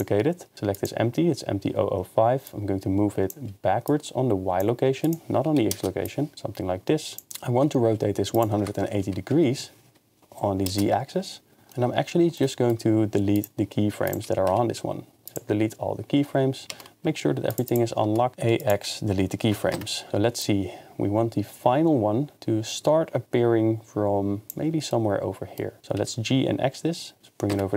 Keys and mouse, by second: 2.6 click, 3.9 click, 5.2 click, 6.0-7.3 drag, 8.3-10.8 drag, 14.1 click, 14.3 a, 14.5 x, 16.7 ctrl+Tab, 17.5 click, 18.1 Tab, 18.3 ctrl+q, 18.3 a, 18.3 x, 19.7 KP_0, 20.4 click, 24.9 middle click, 25.8 g, 26.0 x, 27.5 KP_0.